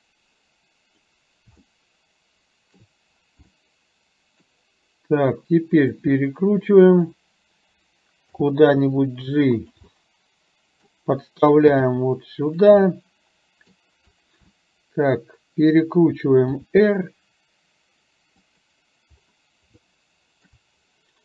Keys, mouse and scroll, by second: 1.7-2.8 shift+middle drag, 3.5-4.5 middle drag, 6.2 click, 8.4 g, 10.0 middle click, 11.8 g, 12.9-13.8 middle drag, 14.7-15.8 middle drag, 16.7 r, 19.8-20.7 shift+middle drag.